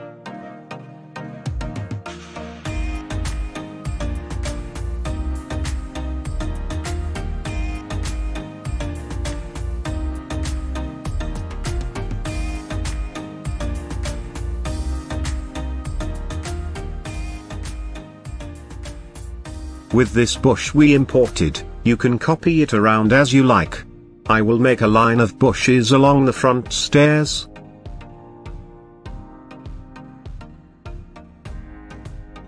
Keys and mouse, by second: 2.2-2.8 middle drag, 3.4-4.6 shift+middle drag, 4.7-5.3 middle drag, 5.5 shift+middle drag, 5.9-6.5 middle drag, 7.0-11.4 shift+middle drag, 11.7-12.1 middle drag, 13.7-15.2 drag, 20.4 g, 20.8 shift+z, 21.9 click, 22.5 s, 23.1 click, 23.5 shift+middle drag, 24.3-24.7 middle drag, 25.3 s, 25.7 click, 26.9 middle click, 27.2-27.6 shift+middle drag, 28.5 g, 28.9 shift+z, 29.6 click, 30.5 g, 31.0 z, 31.3 click, 31.6 middle click, 32.0 shift+middle click.